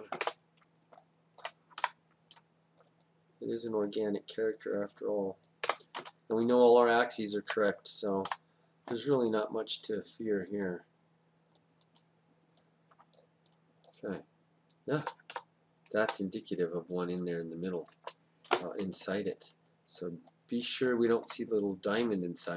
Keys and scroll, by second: 0.3 Return, 1.8 y, 16.1 BackSpace, 17.9 Return.